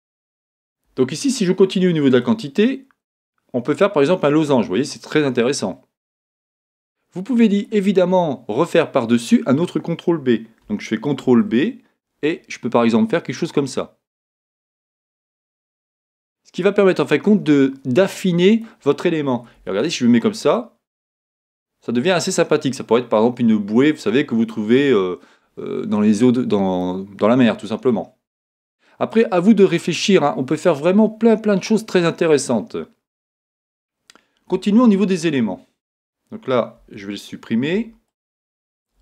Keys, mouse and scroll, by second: 2.2-18.6 drag, 19.6 Tab, 19.9-30.8 middle drag, 26.3-26.8 scroll down 2, 34.5 Tab, 37.7 x.